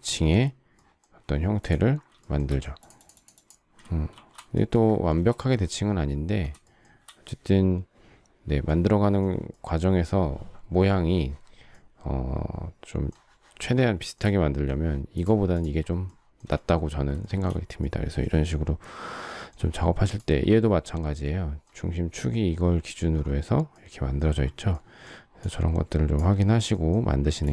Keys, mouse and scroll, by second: 1.2 space, 2.2 shift+middle click, 4.1 shift+r, 5.2 space, 5.3 Escape, 6.6 shift+middle click, 14.1 shift+middle click, 16.0 shift+middle click, 17.2 shift+middle click, 27.2 Delete.